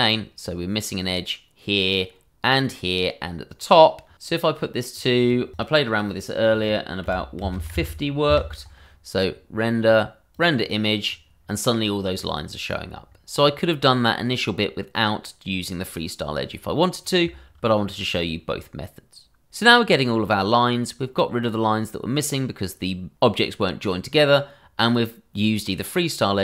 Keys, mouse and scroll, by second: 4.1 click, 7.1 Num_Lock, 8.3 Return, 9.8 click, 10.4 double click.